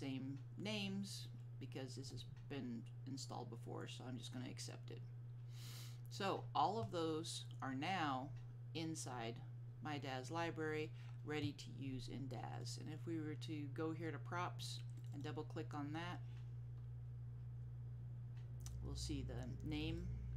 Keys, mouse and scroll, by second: 2.1 click, 12.6 click, 15.1 click, 15.2 double click, 19.8 click, 20.0 double click.